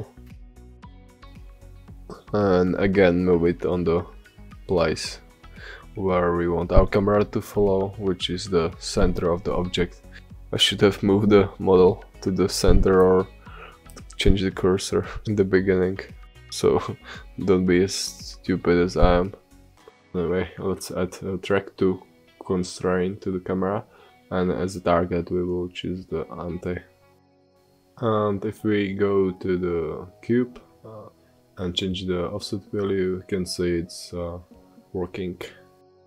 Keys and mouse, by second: 3.4 g, 6.9-8.7 middle drag, 9.2-12.4 middle drag, 14.4-18.4 middle drag, 17.0 g, 18.4 g, 19.9-21.9 drag, 23.0-25.0 drag, 27.4-29.9 drag, 30.2-31.7 drag, 31.7-33.5 middle drag.